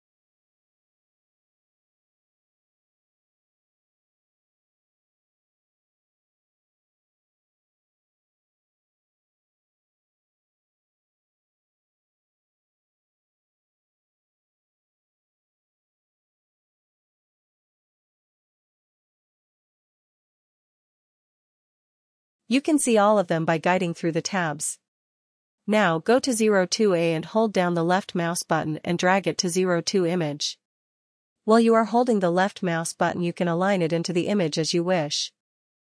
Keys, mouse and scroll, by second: 11.1 click, 13.0 click, 16.1 click, 30.5 click, 33.8 ctrl+-, 34.4 ctrl+-, 35.8 ctrl+-.